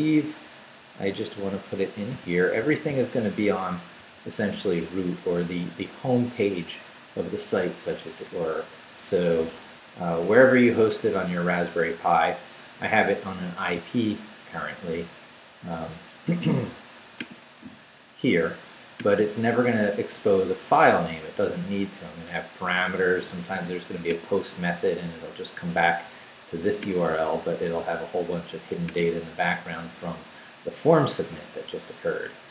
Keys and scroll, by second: 0.1 Right, 1.3 Right, 2.1 i, 2.6 ,, 2.9 space, 4.0 super+v, 5.0 super+Left, 5.6 Left, 7.3 Left, 8.2 BackSpace.